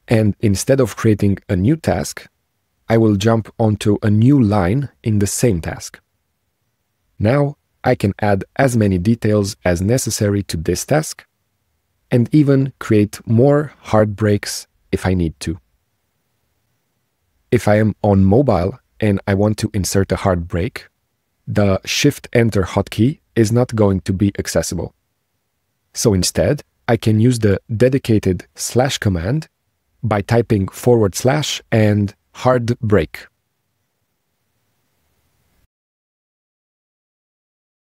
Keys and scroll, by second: 9.9 shift+Return, 33.6 k, 34.5 s.